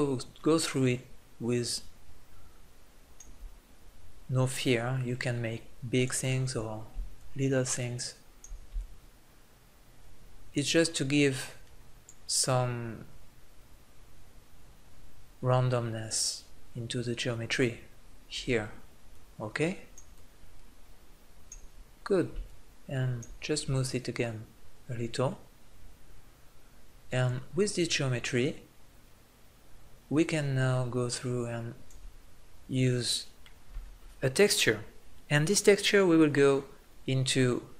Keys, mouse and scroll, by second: 4.5-6.7 drag, 7.3-14.0 drag, 18.6 middle click, 19.2-22.0 drag, 22.0 middle click, 22.5-25.5 drag, 32.1-37.0 middle drag.